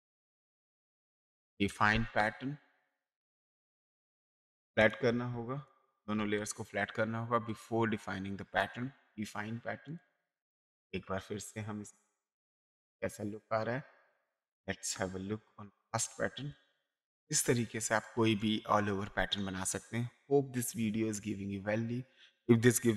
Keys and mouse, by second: 0.2 Return, 0.2 KP_Enter, 1.7 Return, 2.7 click, 4.8 click, 4.8 space, 5.6 click, 6.2 ctrl+e, 7.5 click, 8.5 click, 9.8 click, 12.6 click, 14.4 click, 16.0 click, 16.5 space, 17.1 click, 17.6 click.